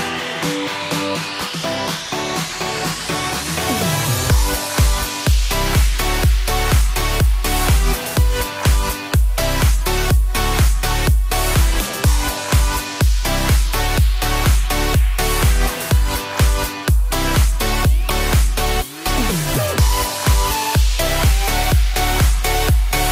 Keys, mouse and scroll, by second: 0.0 ctrl+z, 4.0 ctrl+shift+z, 5.5 click, 6.3 shift+space, 7.9 Escape, 9.1 click, 12.2 click, 12.9 click, 12.9 click, 13.1 click, 14.1 ctrl+z, 14.9 scroll up 3, 15.5 shift+middle click, 15.6 middle click, 16.2 ctrl+z, 18.6 click.